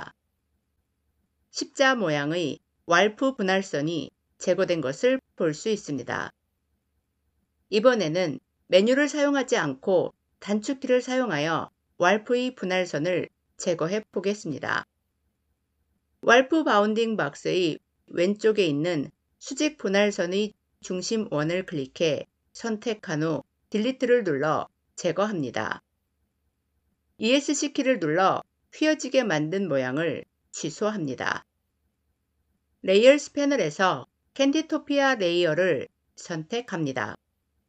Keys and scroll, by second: 23.5 Delete, 27.2 Escape.